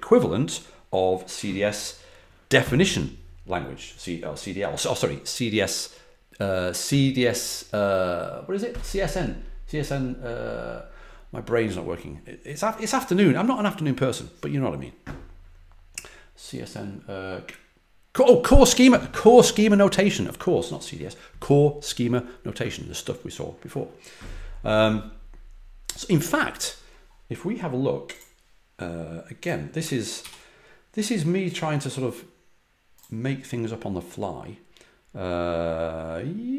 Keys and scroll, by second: 30.1 super+-.